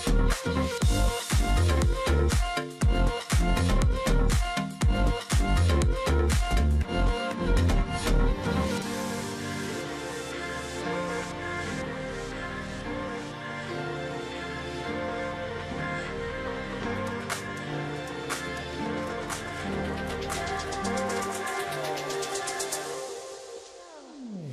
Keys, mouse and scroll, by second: 0.0 ctrl+shift+click, 0.8 alt+click, 1.0 ctrl+click, 1.3 alt+scroll down 1, 1.6 space, 1.9 alt+scroll down 1, 2.0 space, 2.7 alt+scroll up 1, 2.8 alt+scroll down 1, 3.2 alt+scroll up 1, 3.5-4.0 alt+scroll down 1, 4.0 space, 4.3-4.6 alt+scroll up 1, 5.2 ctrl+click, 5.9 double click, 6.9 double click, 8.0 alt+scroll up 1, 8.8 space, 9.5 double click, 10.2 ctrl+click, 10.3 ctrl+double click, 12.8 shift+click, 14.1 alt+click, 14.3 ctrl+click, 17.1 double click, 22.1 ctrl+click, 22.3 alt+scroll down 1, 22.7 space, 23.8 alt+scroll down 1.